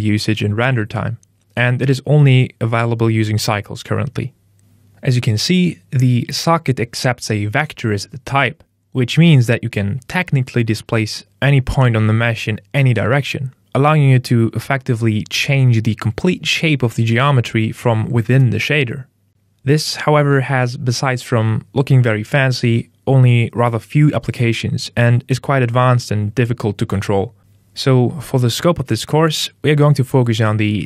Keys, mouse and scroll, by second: 4.6 middle click, 4.6-8.9 scroll up 10, 11.5 middle click, 12.2-12.9 scroll down 8, 12.9 middle click, 14.8 click, 20.0 middle click, 21.2 z, 22.9 z, 26.4-29.4 scroll up 3, 30.2 KP_0.